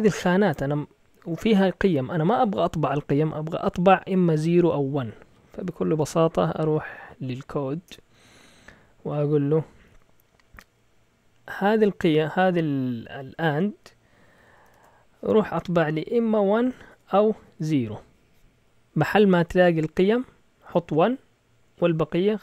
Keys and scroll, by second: 5.9 Up, 6.2 Up, 6.5 Up, 6.8 Up, 7.9 Return, 8.5-10.9 typing, 14.3-14.7 typing, 16.2-17.6 typing.